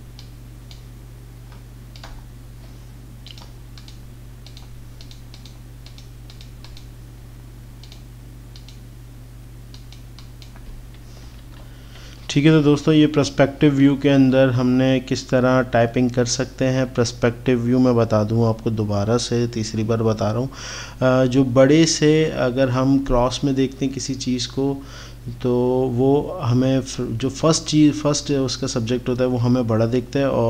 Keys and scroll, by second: 11.4 ctrl+-.